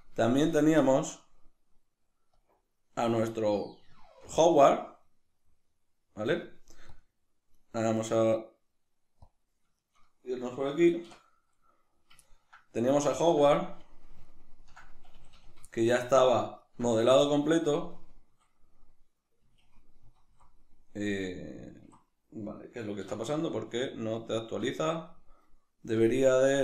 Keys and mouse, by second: 0.2-2.4 shift+middle drag, 2.4 click, 3.6-9.3 middle drag, 7.0 click, 9.3-9.7 right drag, 9.7-26.6 shift+middle drag, 11.0 \, 13.5 z, 15.1 a, 18.4 Left, 20.2 Right, 21.2 Left, 21.9 Right, 23.2 \.